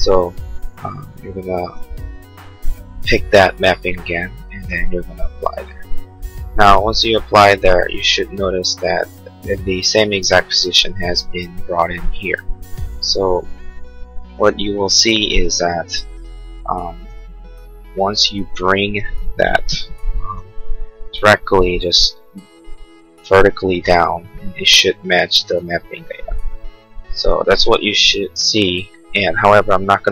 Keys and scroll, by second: 20.3 m.